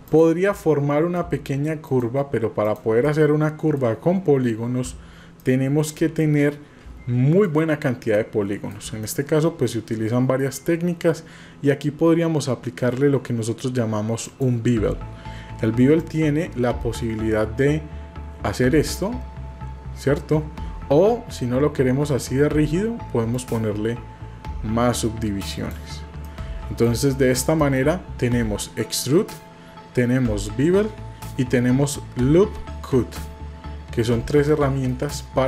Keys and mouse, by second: 0.7 middle click, 2.6 shift+click, 3.2 middle click, 5.5 shift+middle click, 6.3-7.5 middle drag, 8.3 shift+middle click, 9.2-10.4 middle drag, 14.3 click, 16.1-18.9 drag, 23.5-25.8 drag, 26.3 middle click, 27.2 shift+middle click, 27.7 middle click, 35.0-35.4 middle drag.